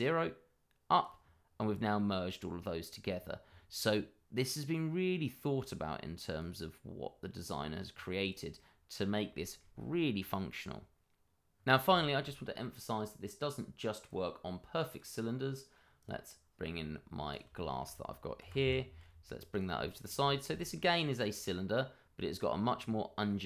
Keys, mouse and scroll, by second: 1.5-3.0 scroll down 1, 4.4 middle click, 6.3 click, 7.9 scroll down 1, 8.2 click, 8.5 middle click, 9.4 shift+middle click, 9.4 middle click, 9.7-11.2 scroll up 1, 11.5 scroll down 1, 11.9 shift+middle click, 14.0 click, 16.8-17.3 scroll up 1, 17.3 click, 17.5 shift+middle click, 17.6 middle click, 17.7 shift+middle click, 18.6 y, 19.5 click, 19.8 shift+middle click, 19.9 middle click, 19.9 shift+middle click, 20.1-20.5 scroll up 1, 20.5 shift+middle click, 20.8-21.1 shift+scroll up 2, 21.1 middle click, 22.7-23.4 scroll down 1.